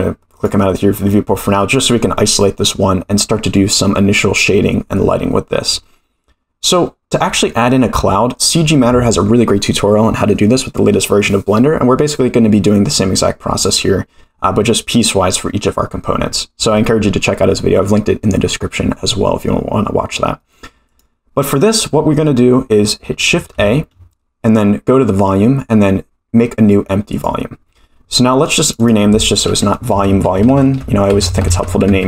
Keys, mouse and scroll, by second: 0.4 click, 1.1 middle drag, 7.5 middle click, 20.9 click, 21.8 middle click, 22.2 scroll up 1, 23.5 shift+a, 28.6 click, 28.8-32.0 drag, 31.4 e.